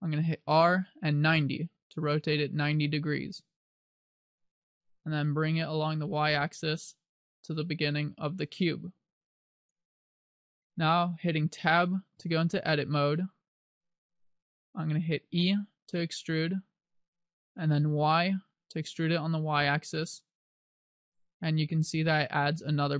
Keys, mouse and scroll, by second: 0.7 r, 2.5 click, 4.6 click, 12.3 Tab, 14.1 right click, 15.7 e.